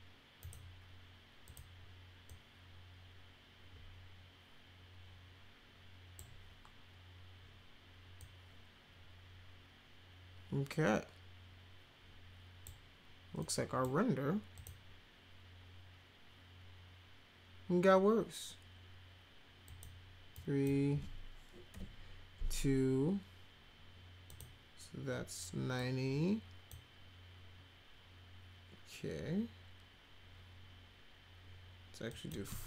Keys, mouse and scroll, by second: 0.4 click, 1.4 click, 2.2-6.1 drag, 8.1-12.6 drag, 13.3-13.8 drag, 14.5 click, 19.6 click, 20.3 click, 21.7 2, 24.3 click, 25.7 click, 32.1 click.